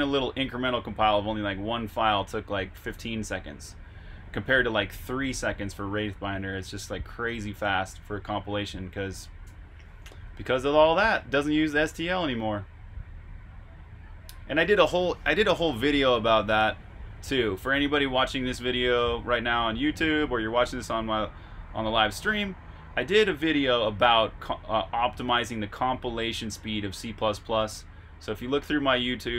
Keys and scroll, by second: 10.1-11.1 typing.